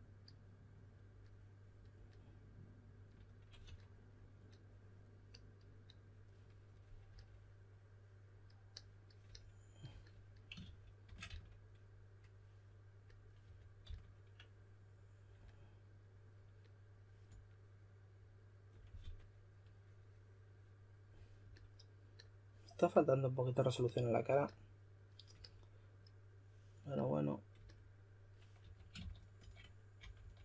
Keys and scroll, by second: 3.6 5, 10.3-11.7 typing, 13.1-14.3 typing, 19.0 5, 28.4-30.4 typing.